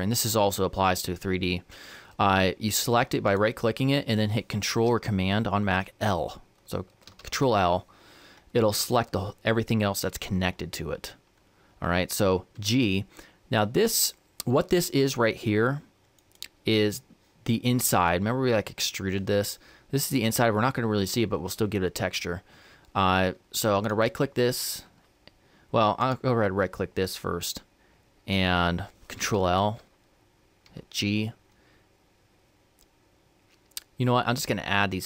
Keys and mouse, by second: 3.0-7.0 right drag, 7.0 ctrl+l, 12.4 g, 23.6-29.1 right drag, 29.1 ctrl+l, 30.4 g.